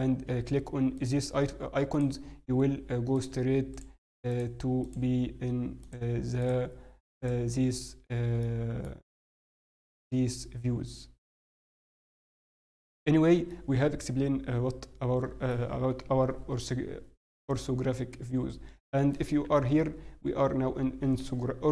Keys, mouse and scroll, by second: 8.4 middle click, 11.8 middle click, 13.0-14.0 scroll down 4, 13.4 middle click, 18.1 middle click, 19.8 scroll up 1.